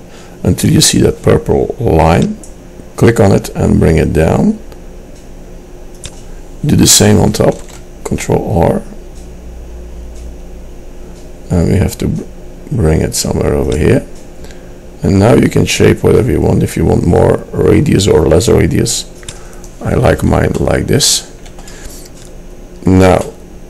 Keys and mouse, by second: 7.7 ctrl+r, 20.8 middle click.